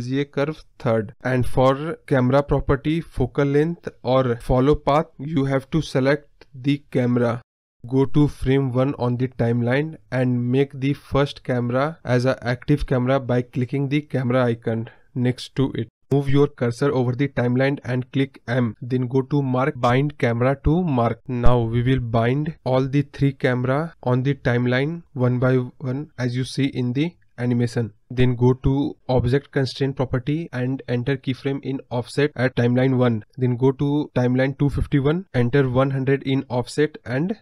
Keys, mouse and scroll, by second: 13.7 click, 18.8 m, 20.6-32.6 drag, 32.6 Right, 34.4 KP_0, 35.0-37.1 drag, 37.1 space.